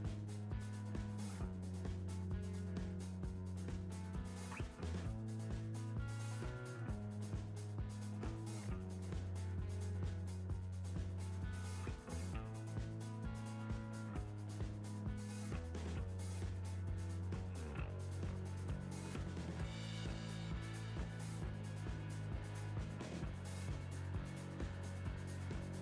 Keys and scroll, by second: 1.7 Tab, 4.5 Tab, 7.9 Return.